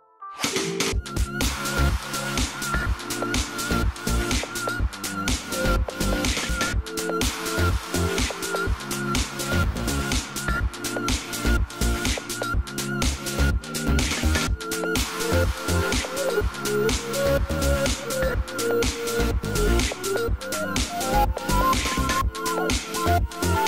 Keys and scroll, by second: 9.5 ctrl+z.